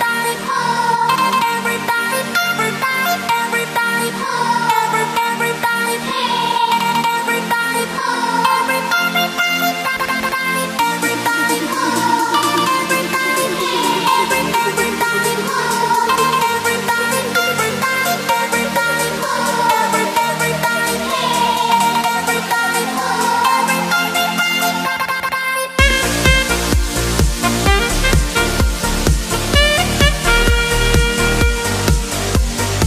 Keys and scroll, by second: 8.9 super+t, 26.4 Return.